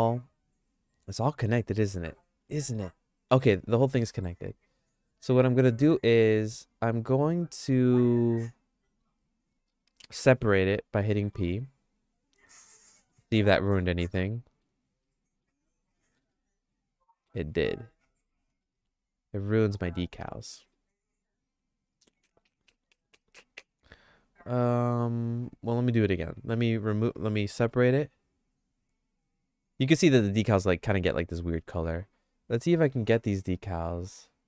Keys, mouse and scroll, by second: 0.4 click, 1.4 click, 2.4 l, 11.3 p, 13.1 middle click, 13.5-14.6 shift+middle drag, 15.1 middle click, 16.0 middle click, 16.3-17.3 shift+middle drag, 17.9 ctrl+z, 18.8 Tab, 20.2 middle click, 20.8-25.7 shift+middle drag, 26.6 Tab, 27.6 p, 31.1 Tab, 32.0 click.